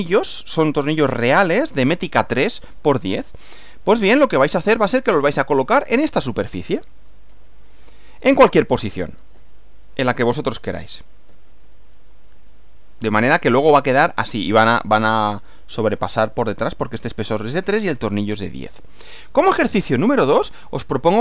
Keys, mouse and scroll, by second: 3.8 click, 7.3 Right, 8.7 click, 9.4 Right, 10.9 click, 11.3 Right, 19.4 Right.